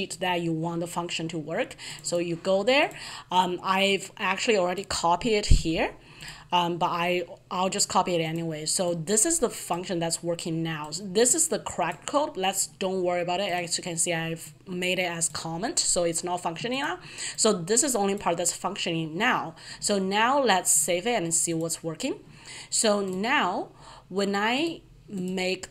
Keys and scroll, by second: 6.1 ctrl+v.